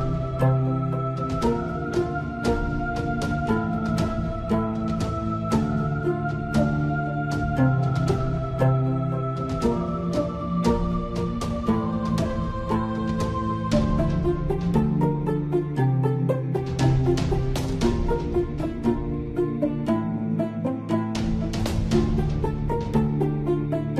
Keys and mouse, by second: 0.6 click, 2.2-3.4 middle drag, 3.5 middle click, 4.0 ctrl+f, 7.3 KP_7, 8.4 z, 10.1 z, 12.4 i, 14.1 i, 19.3 middle click, 19.8 middle click, 20.6 middle click, 22.2 Tab.